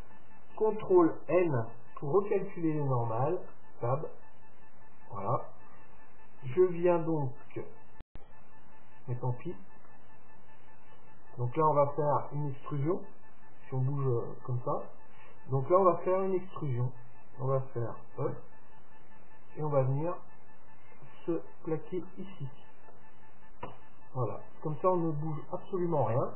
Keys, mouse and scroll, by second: 1.2 ctrl+n, 3.0 Tab, 3.6 middle click, 5.4-6.5 scroll up 1, 6.5-8.2 middle drag, 9.9-11.9 middle drag, 14.5-16.4 drag, 18.4 e, 21.6-22.1 scroll up 1, 22.1-24.0 middle drag, 23.7 Tab, 24.4-26.3 middle drag.